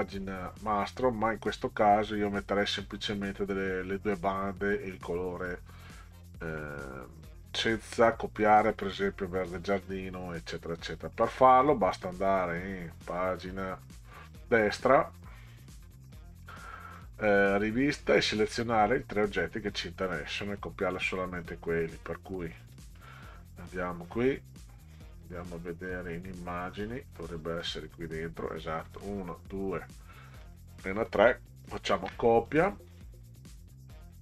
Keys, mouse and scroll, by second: 8.4 click, 9.7 scroll down 2, 11.9 click, 13.0 click, 14.1 click, 14.3 click, 18.3 click, 18.7 click, 21.4 click, 22.7 click, 23.7 click, 26.8 click, 27.6 click, 29.0 shift+click, 30.4 shift+click, 32.0 ctrl+c.